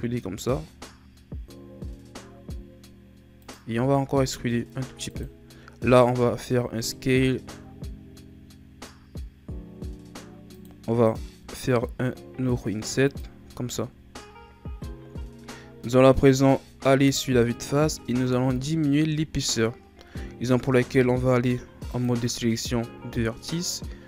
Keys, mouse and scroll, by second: 3.8 e, 13.4 Tab, 16.8 KP_1, 18.1 Tab, 20.8 ctrl+Tab.